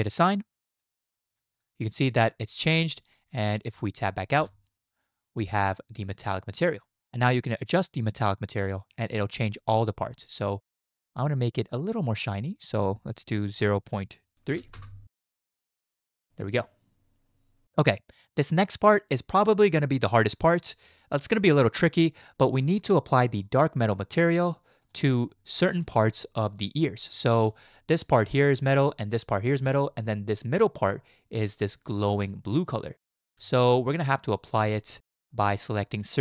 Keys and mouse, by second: 0.8 click, 4.4 Tab, 12.1-14.8 drag, 24.8 click, 25.3 shift+drag, 27.2 shift+drag, 33.5 shift+middle drag.